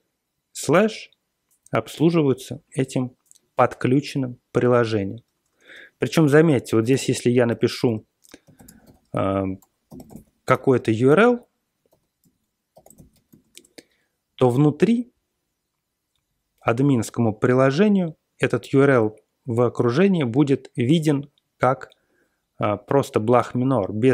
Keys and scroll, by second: 5.2-13.7 typing.